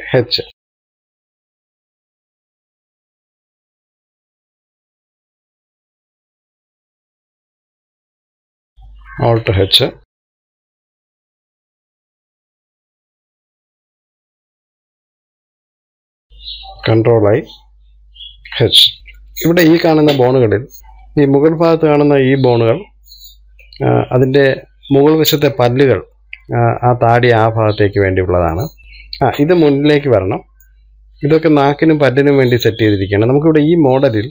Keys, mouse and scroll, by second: 0.7 h, 1.1 KP_1, 1.7 click, 2.4 click, 2.9 click, 3.1 click, 3.9 click, 5.0 KP_3, 5.6 click, 6.3 click, 7.0 click, 7.7 KP_1, 8.2 scroll down 1, 8.4 middle click, 9.1-9.6 scroll up 1, 10.1 alt+h, 10.4 scroll up 1, 10.5 middle click, 11.7 scroll up 2, 12.0 click, 12.3 middle click, 12.6 shift+click, 12.9-14.2 middle drag, 14.2 scroll up 2, 14.3 shift+middle click, 14.5 shift+click, 14.7 shift+click, 14.9 shift+click, 15.1 middle click, 15.7 shift+click, 15.9 shift+click, 16.2-17.9 middle drag, 17.9 ctrl+i, 19.0-23.9 middle drag, 27.3-28.8 middle drag, 29.1-34.3 middle drag.